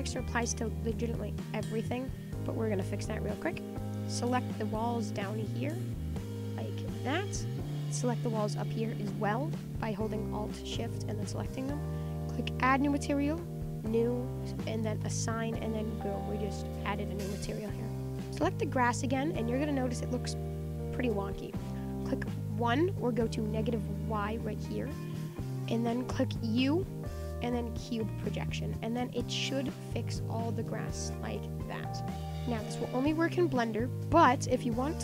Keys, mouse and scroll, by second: 1.2-1.5 scroll down 1, 1.5-3.3 middle drag, 3.3 click, 3.7 middle click, 4.2-4.7 scroll up 6, 4.7-5.9 middle drag, 5.9 alt+shift+click, 6.2 middle click, 6.9-7.4 scroll down 7, 7.4 middle click, 8.3 alt+shift+click, 8.8 middle click, 9.3-9.7 scroll up 1, 9.7-12.8 shift+middle drag, 12.8-15.7 drag, 15.7 Tab, 15.9-17.1 middle drag, 17.4 middle click, 17.5 Tab, 18.1 click, 18.4 alt+shift+click, 18.8 middle click, 19.4 scroll up 5, 19.6 middle click, 20.0 scroll up 4, 20.3-23.4 middle drag, 24.8 click, 25.4-26.6 scroll down 8, 26.6 u, 28.2 middle click, 29.0-30.1 scroll up 9, 29.3 middle click, 29.9 Tab, 30.1-30.8 middle drag, 30.8-31.6 scroll down 11, 31.6-32.3 scroll up 15, 32.4-33.4 scroll down 18, 33.4-33.8 middle drag, 33.8-34.2 scroll up 7, 34.2-35.0 middle drag.